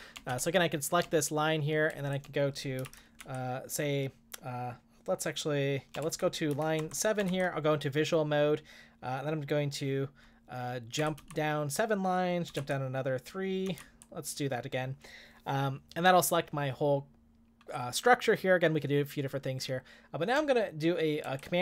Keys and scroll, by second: 0.0-0.8 typing, 1.9-3.3 typing, 6.2-7.3 typing, 10.8-14.3 typing.